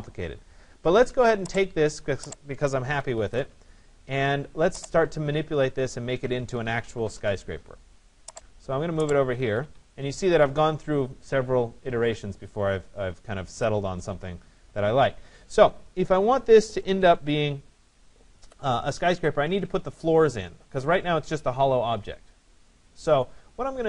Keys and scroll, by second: 2.5 Escape, 6.7 Return.